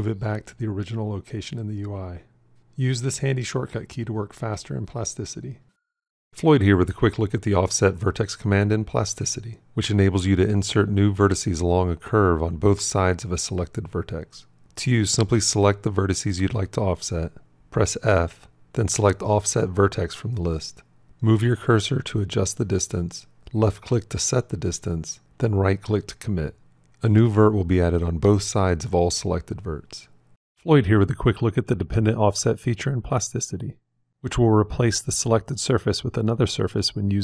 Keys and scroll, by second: 17.6 f.